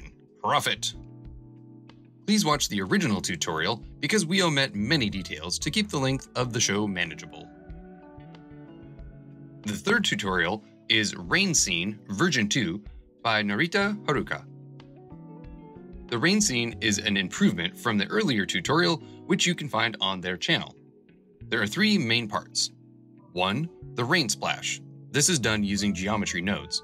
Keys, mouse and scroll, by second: 0.0 click, 1.8-4.3 drag, 5.1 click, 5.3 scroll down 8, 6.2 scroll down 1, 6.6 click, 16.9 space.